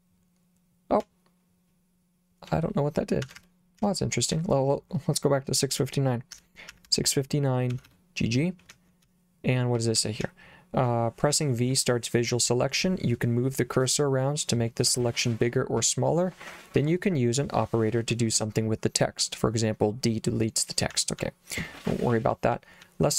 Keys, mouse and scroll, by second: 1.0 k, 3.3 Escape, 3.8 k, 6.1-11.3 typing, 20.9-22.9 typing.